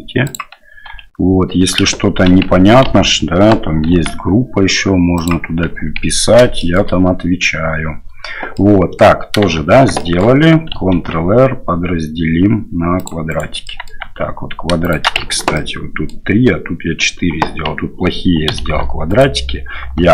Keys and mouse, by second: 0.9 h, 2.9 alt+h, 3.9 g, 6.7 shift+middle click, 8.6 middle click, 9.6 shift+z, 10.1 shift+middle click, 10.9 ctrl+r, 13.8 middle click, 14.7 shift+Tab, 14.8 shift+middle click, 15.5 middle click, 16.1 click, 18.5 2, 19.1 alt+right click.